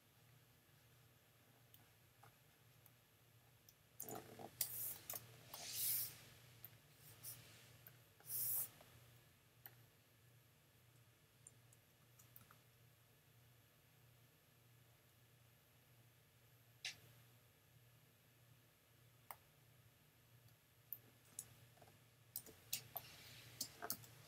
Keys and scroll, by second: 4.6 super+j, 12.0 super+z, 12.4 super+x, 22.4 super+j, 22.8 super+space, 23.5 space, 23.9 i.